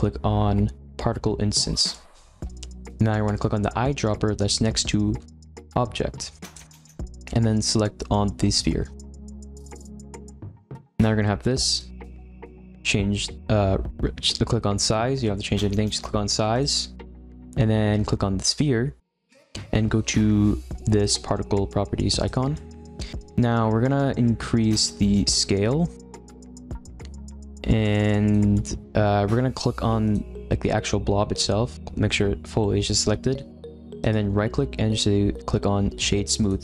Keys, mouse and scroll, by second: 6.4 click, 10.8-13.9 scroll up 3, 16.5 click, 18.5 click, 22.1 click, 22.5 middle drag, 22.7-24.2 scroll up 3, 24.2-24.8 scroll down 2, 25.1-28.5 drag, 28.5-30.0 middle drag, 30.0 click, 34.0-36.6 right drag.